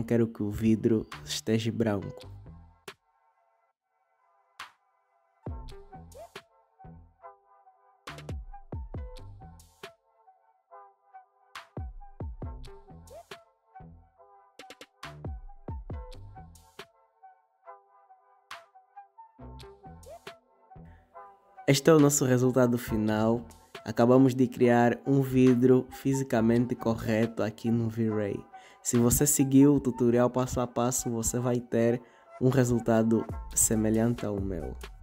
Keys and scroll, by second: 3.6 \, 8.0 \.